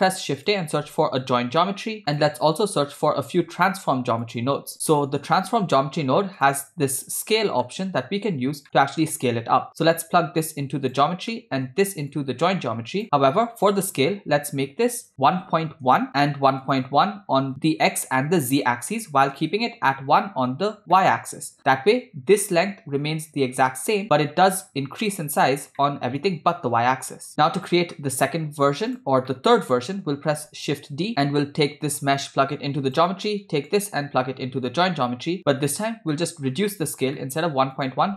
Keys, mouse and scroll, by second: 3.5 shift+a, 7.4 middle click, 8.6 middle click, 9.7-11.0 drag, 11.3 middle drag, 12.1 click, 13.0 middle click, 13.5-14.1 scroll up 4, 15.0 click, 16.6-17.9 drag, 21.0-24.6 middle drag, 25.8-26.3 middle drag, 27.7 middle click, 28.1-28.8 scroll down 3, 28.9 click, 29.3 middle click, 30.6 shift+d, 31.2 g, 32.0-33.0 drag, 33.7-35.8 drag, 36.1 middle click, 36.4-37.1 scroll up 5, 37.2 middle click, 37.8-38.1 drag.